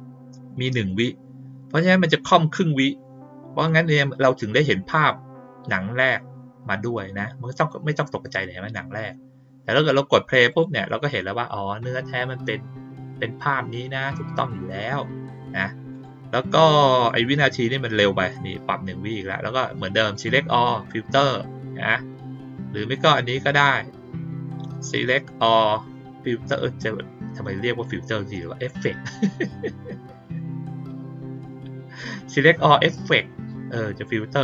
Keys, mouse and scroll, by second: 3.6 click, 7.5 click, 10.4 click, 15.9 click, 16.9 click, 20.1 click, 23.0 click.